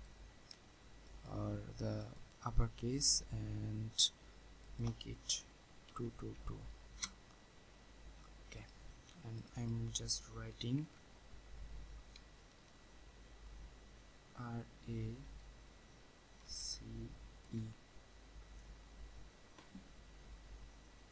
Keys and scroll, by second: 6.9 Return, 10.8 ctrl+a.